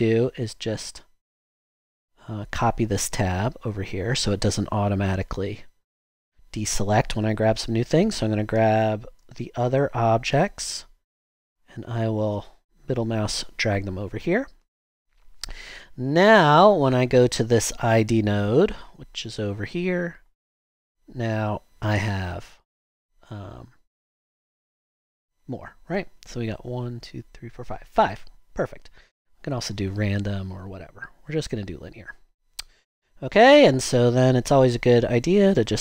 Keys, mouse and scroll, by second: 2.4 click, 3.8 click, 34.7-35.4 drag.